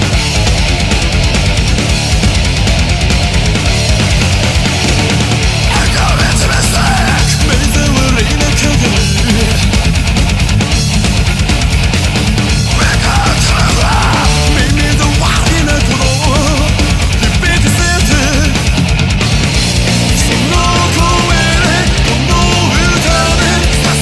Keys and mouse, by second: 6.9 ctrl+z, 11.2 ctrl+z, 15.8 ctrl+z.